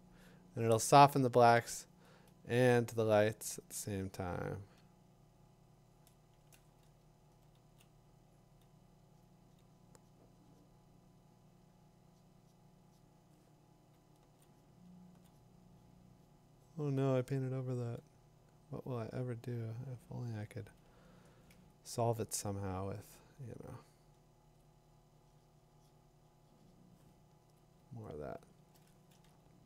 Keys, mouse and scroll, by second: 2.8 click, 3.2 click, 5.6 click, 6.1 click, 10.0 [, 13.9 [, 14.8 [, 24.4 ctrl+click, 24.6 click, 27.6 click, 28.2 click.